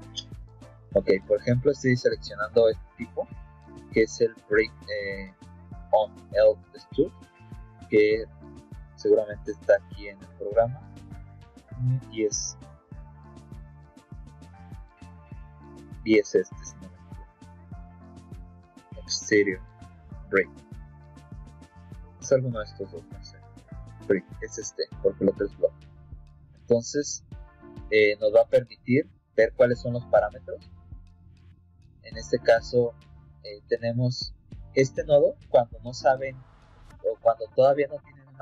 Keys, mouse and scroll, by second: 7.6 click, 9.4 click, 10.1 click, 11.2-15.3 drag, 27.8 click, 28.6 click, 29.7 middle click, 30.5 click, 35.7 click.